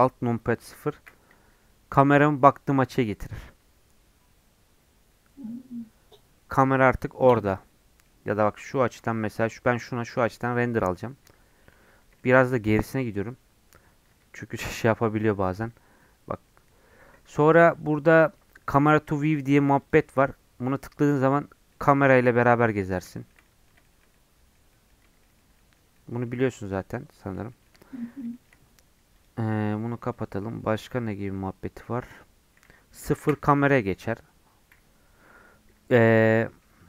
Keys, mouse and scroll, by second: 6.5 middle click, 6.8-7.5 scroll down 2, 7.0 middle click, 7.5-8.5 middle drag, 8.5-9.5 scroll up 9, 9.1 shift+middle click, 9.5-10.8 middle drag, 10.8-11.7 scroll down 3, 11.7-12.2 scroll up 3, 12.2 shift+middle click, 12.4 scroll down 4, 14.6 ctrl+alt+KP_0, 19.8-21.7 drag, 21.7-29.1 middle drag, 29.1 click, 29.7 middle click, 30.3 scroll down 1, 30.5 middle click, 31.4-31.8 scroll up 4, 31.8-33.2 middle drag, 33.2 KP_0, 36.1 middle click, 36.8 scroll down 4.